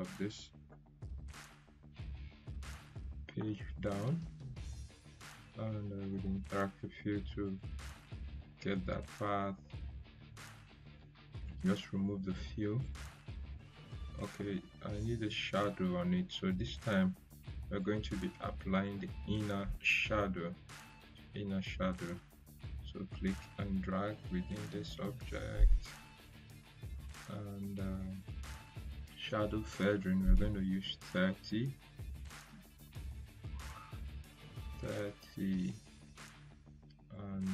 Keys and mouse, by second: 2.9 shift+Page_Down, 6.0 shift+Page_Down, 6.0 click, 11.7 click, 17.7-18.4 drag, 32.1 3, 33.3 Return, 37.1 click.